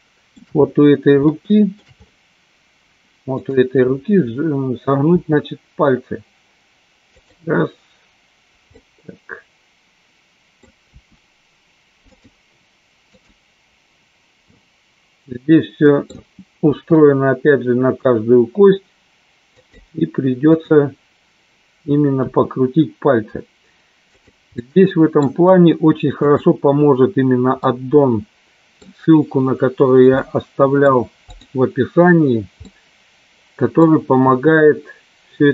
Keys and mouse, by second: 1.3 shift+middle click, 3.4 click, 5.0 r, 7.4 click, 8.8-10.7 middle drag, 12.3 click, 13.0-14.0 drag, 14.4-16.2 middle drag, 16.9 r, 20.5 click, 22.4 r, 24.4 click, 24.5 middle click, 26.3 click, 27.7-28.8 middle drag, 30.2 middle click, 31.3 click, 32.7-33.8 middle drag, 34.4 r.